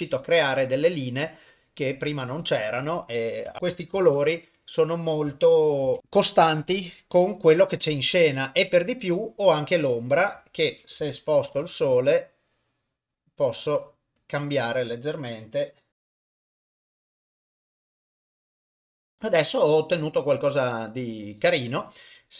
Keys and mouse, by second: 3.0 click, 3.5 Tab, 3.6 click, 4.0 ctrl+s, 4.5 click, 6.0 click, 8.0 click, 10.2 click, 11.9 r, 15.9 r, 16.3 r, 17.8 r, 18.9 ctrl+s.